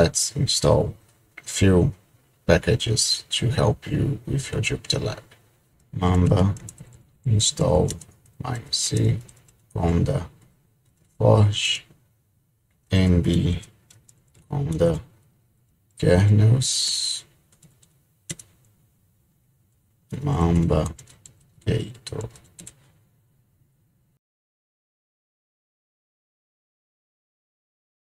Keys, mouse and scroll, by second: 5.5-18.3 typing, 19.5-23.1 typing, 25.3 typing, 25.6 Return.